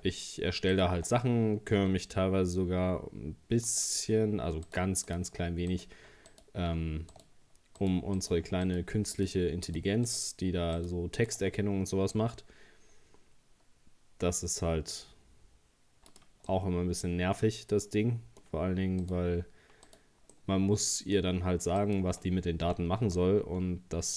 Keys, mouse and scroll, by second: 0.7 shift+right click, 1.8 s, 4.7 right click, 5.1 shift+right click, 5.7 right click, 6.3 alt+shift+right click, 7.1 shift+right click, 7.8 shift+right click, 8.2 shift+right click, 8.7 shift+right click, 9.2 shift+right click, 9.7 shift+right click, 10.1 shift+right click, 10.8 shift+right click, 11.2 shift+right click, 12.2 s, 16.5-19.0 middle drag, 19.0 right click, 19.9 right click, 20.3-21.8 middle drag, 21.8 shift+right click, 22.6 g.